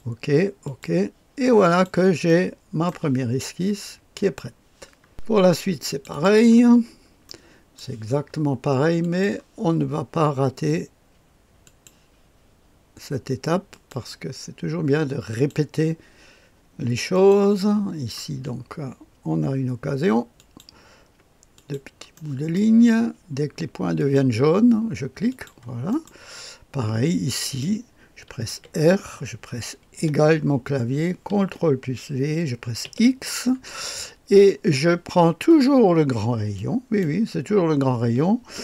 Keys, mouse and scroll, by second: 0.6 click, 1.6 click, 2.2 middle click, 3.1-7.3 drag, 7.3 middle click, 7.3-7.8 scroll up 1, 7.8-8.1 scroll up 1, 9.0 click, 11.7 click, 13.7 click, 15.3 click, 17.1 click, 20.4 click, 21.6 click, 22.2 middle click, 24.0 click, 25.3 click, 25.9 click, 26.4-27.4 right drag, 27.4 click, 28.5 r, 29.8-30.6 typing, 31.4 ctrl+v, 32.9 x, 36.6-38.6 drag.